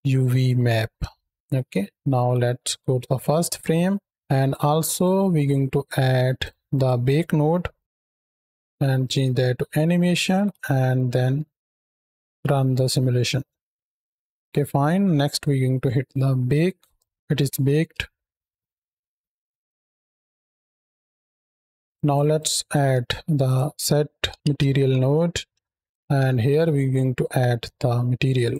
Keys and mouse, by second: 1.5 middle click, 1.9 shift+Right, 2.0 shift+Left, 3.2 click, 4.0 click, 4.8 click, 5.9 shift+a, 8.6 drag, 8.9 click, 10.1 shift+Right, 10.2 shift+Left, 11.0 space, 11.9-12.2 drag, 13.2-14.4 drag, 14.4 space, 16.8 click, 17.1-17.7 middle drag, 17.8 space, 18.7-20.9 middle drag, 21.8 ctrl+s, 21.8 click, 21.8 space, 22.2 click, 22.9 shift+a, 28.2 click.